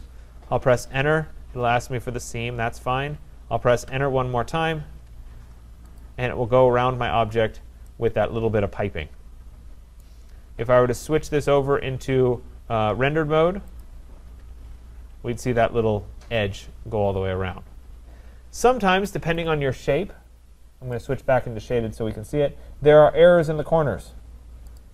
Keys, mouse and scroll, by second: 0.7 Return, 3.9 Return, 6.0 click, 7.4 middle click, 7.4 middle click, 10.0 right click, 11.4 click, 13.8 click, 15.3-16.4 scroll, 19.5 click, 21.1 click, 21.6-22.9 scroll, 23.1-23.7 scroll, 24.8 click.